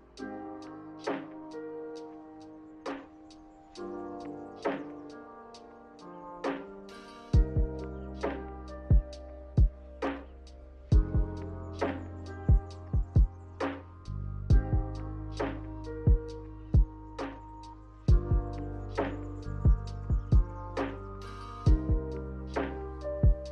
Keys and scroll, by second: 0.9 a, 2.1 m, 9.3 a, 14.6 ctrl+z, 14.9 ctrl+z, 16.9 b, 18.4 Delete, 19.2 Delete, 21.0 a.